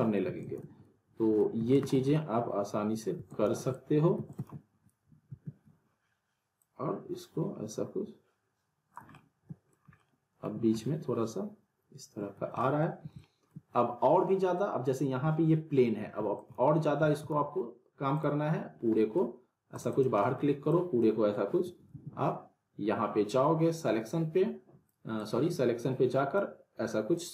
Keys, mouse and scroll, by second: 0.2 alt+w, 0.4 alt+right click, 1.7 alt+right click, 1.8 alt+w, 2.1-3.1 alt+middle click, 3.1 alt+w, 3.3 alt+right click, 3.4 alt+w, 4.1 w, 4.3 right click, 4.4 w, 5.3 ctrl+z, 6.6-9.1 drag, 9.1-9.7 alt+middle click, 9.7 scroll up 1, 9.9-10.6 alt+middle drag, 12.4 scroll down 1, 12.6-13.8 alt+middle drag, 16.2 alt+w, 16.4 alt+right click, 16.5 alt+w, 17.1 alt+right click, 17.2 alt+w, 18.1 click, 18.7 scroll down 1, 18.9 middle click, 19.4 scroll down 1, 19.7 click, 20.2 middle click, 20.7 click, 21.9 ctrl+z, 23.2-25.1 drag.